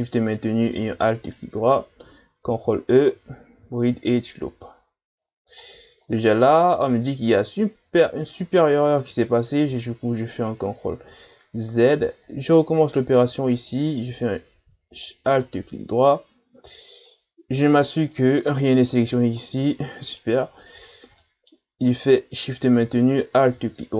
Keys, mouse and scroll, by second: 1.1 alt+shift+right click, 2.5 ctrl+e, 5.2-6.5 scroll down 10, 6.5-9.7 middle drag, 9.7 ctrl+z, 11.1-11.7 scroll up 5, 11.7 middle click, 12.1-13.2 scroll up 3, 13.6 right click, 14.9 alt+right click, 17.1 scroll down 5, 17.6-18.7 scroll down 4, 19.4-19.9 scroll up 7, 19.9 middle click, 20.5 scroll up 3, 20.8-21.2 ctrl+scroll down 2, 21.2 middle click, 21.7-22.2 scroll up 1, 22.2-23.2 middle drag, 23.2 alt+shift+right click.